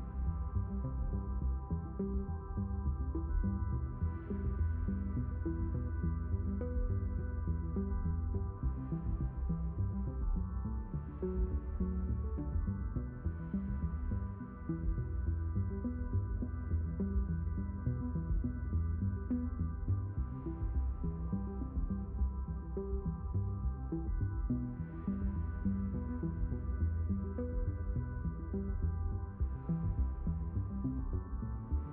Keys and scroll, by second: 25.9 b, 27.5 m.